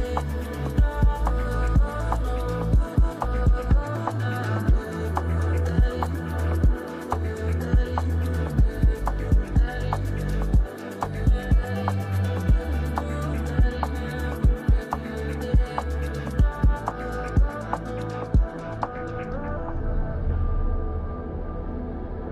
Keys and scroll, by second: 3.8 space, 5.7 space, 10.9 space, 11.9 space.